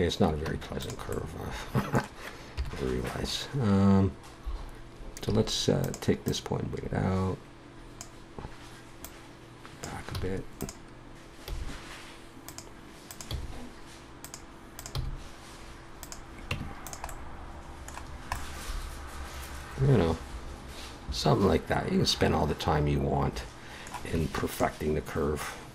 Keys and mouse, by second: 0.4 Tab, 1.1 click, 2.6 KP_7, 3.2 middle click, 5.3 a, 5.9-8.1 drag, 9.0-10.1 drag, 10.1 a, 11.5 g, 12.4 click, 13.3 g, 14.9 g, 16.5 Tab, 20.4-22.0 middle drag, 24.1 Tab.